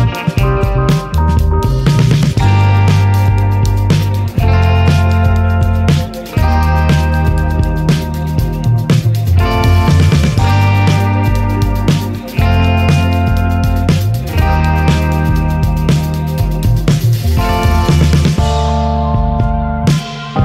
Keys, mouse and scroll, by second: 3.7 click, 5.3-8.3 drag, 8.8 click, 10.7-14.5 drag, 15.4 click, 17.3-20.4 drag.